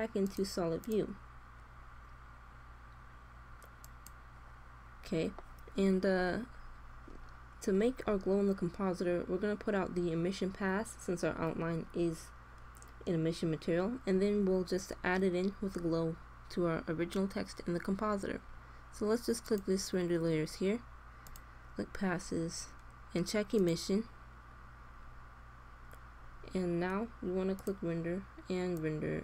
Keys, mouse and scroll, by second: 6.5-17.4 middle drag, 19.4-22.9 drag, 23.5-25.2 drag.